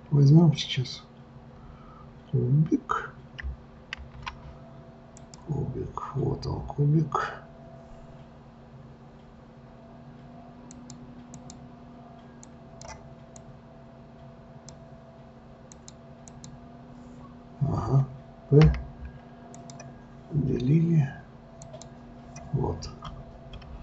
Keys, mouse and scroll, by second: 4.0 shift+a, 10.7 click, 11.4 click, 12.4-15.9 drag, 16.3 click, 18.7 p, 21.6 click, 22.9-23.5 scroll up 2, 23.5-23.8 scroll down 1.